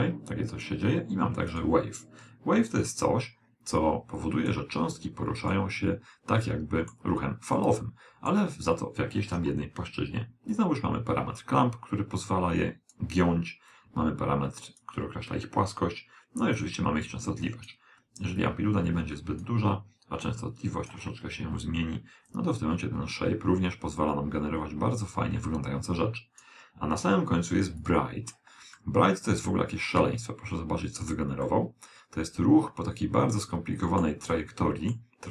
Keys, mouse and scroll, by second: 1.6-4.4 drag, 5.6-7.4 middle drag, 7.4 scroll down 1, 7.6-9.4 middle drag, 10.6 click, 13.8 click, 16.6 click, 18.4 click, 20.3 click, 22.3 click, 27.8 click, 28.8-30.6 middle drag, 31.5-33.3 middle drag, 34.4-35.3 middle drag.